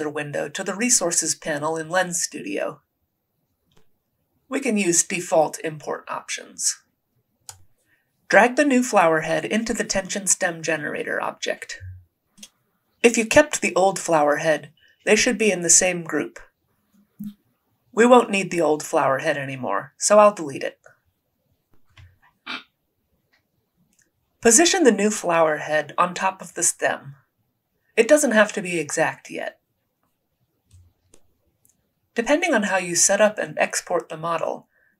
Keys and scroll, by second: 1.7 alt+Tab, 20.2 Delete, 23.8 r, 26.7 w, 32.3 typing.